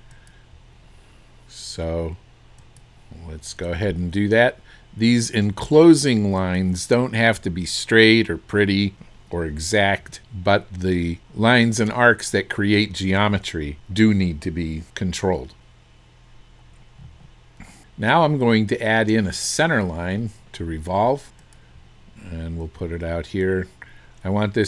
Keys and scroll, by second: 10.0 Escape.